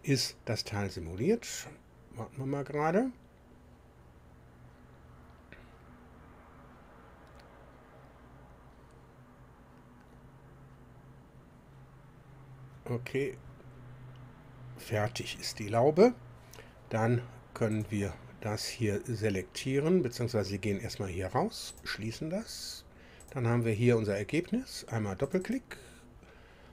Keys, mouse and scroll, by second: 17.7 click, 20.6-20.9 scroll up 1, 21.7 click, 23.2 click, 25.2 click.